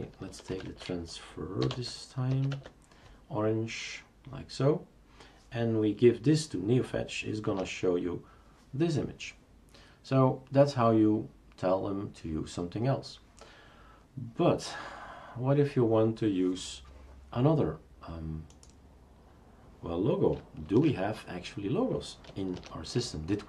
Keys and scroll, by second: 0.1-2.3 typing, 2.5 Tab, 7.5 Return, 20.7 shift+super+q, 22.5 shift+super+Return.